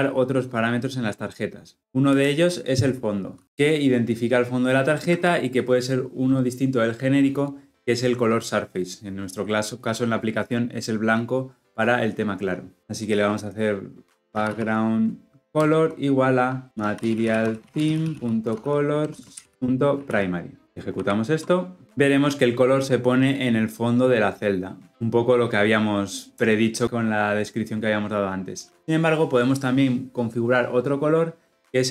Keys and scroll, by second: 15.4 Return, 20.8 shift+F10.